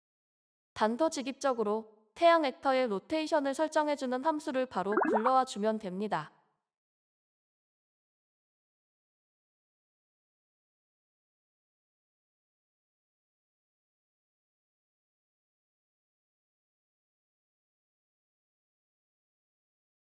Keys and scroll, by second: 0.0-2.9 typing, 5.1 ctrl+s, 12.4 typing, 12.7 Return, 13.3 ctrl+s.